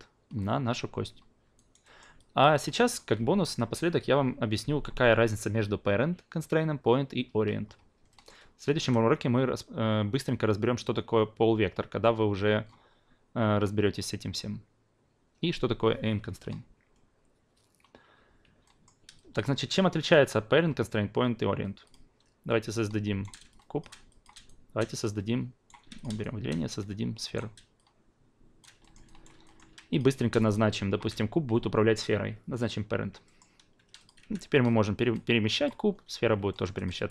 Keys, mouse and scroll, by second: 1.6 alt+right click, 1.8 alt+middle drag, 2.2 alt+drag, 2.9 click, 8.1 alt+middle click, 18.6 alt+middle drag, 19.2 alt+click, 20.0 click, 21.8 click, 22.6-23.2 shift+right drag, 23.5 shift+click, 24.1-24.4 alt+drag, 24.7 right click, 28.8 alt+middle click, 29.0 alt+right click, 29.4 alt+middle click, 29.9 click, 32.6 click, 33.2 alt+middle click, 34.0 click, 34.2 w, 34.6-35.6 drag, 35.8 ctrl+z, 36.5 alt+middle click, 36.8 alt+click, 37.0 e.